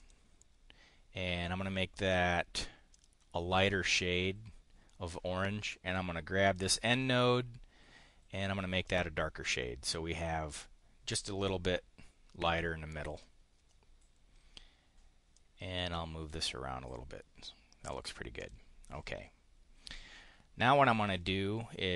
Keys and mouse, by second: 2.9 click, 6.4 click, 8.9 click, 11.6-13.3 drag, 15.3-16.4 drag, 17.8 click, 18.4 click.